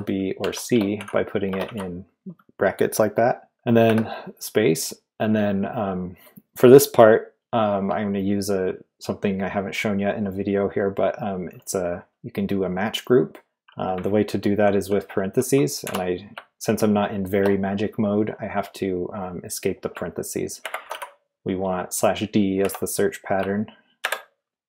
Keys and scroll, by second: 0.0-1.6 typing, 3.8 space, 15.8 \, 20.5-21.3 typing, 22.6 typing, 24.0 typing.